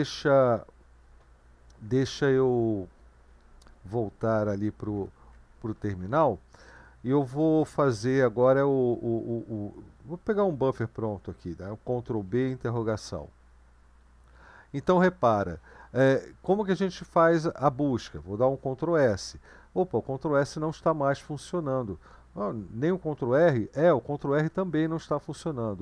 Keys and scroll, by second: 5.0 super+2, 12.2 ctrl+b, 13.5 ctrl+r.